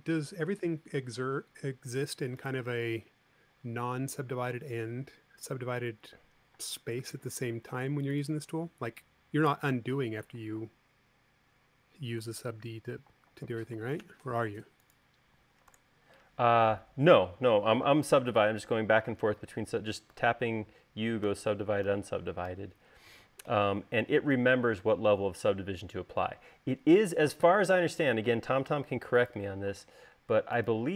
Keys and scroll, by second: 7.3 space, 12.9 BackSpace, 14.5 super+z, 16.4 BackSpace, 20.8 u, 21.9 u, 23.1 typing.